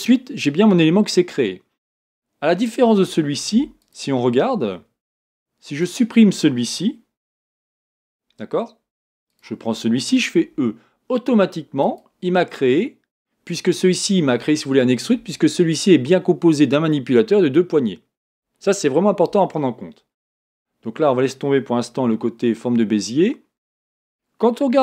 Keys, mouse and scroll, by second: 3.4 Tab, 3.8 click, 4.4 Tab, 5.8 click, 7.3 x, 9.3 click, 10.4 e, 20.3 Tab.